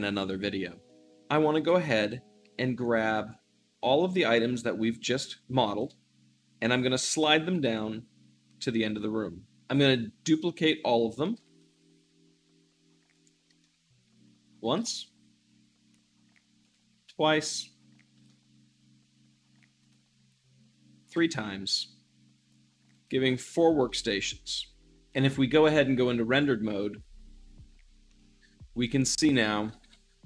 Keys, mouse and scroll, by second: 1.5 `, 3.2-6.3 drag, 6.3 middle click, 6.4-9.5 shift+middle drag, 9.5-11.2 drag, 11.2 shift+d, 11.3-13.0 middle drag, 13.0-13.4 drag, 13.5-14.6 shift+middle drag, 14.6 shift+d, 14.8-16.0 middle drag, 16.5 click, 17.1-18.1 middle drag, 18.1 shift+d, 19.7-20.4 drag, 20.4 middle click, 21.0 g, 21.1-22.8 middle drag, 22.8-23.8 drag, 23.8-24.4 middle drag, 24.5 shift+z, 25.0-29.6 drag, 29.6 a.